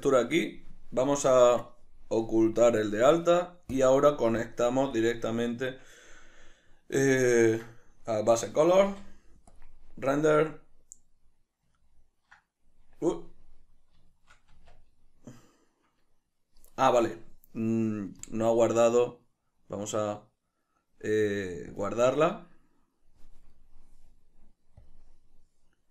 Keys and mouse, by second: 2.6 click, 4.8 click, 7.4-18.6 ctrl+middle drag, 9.3 z, 14.9 Tab, 18.6-23.9 drag, 23.9-25.2 middle drag, 25.2-25.9 drag.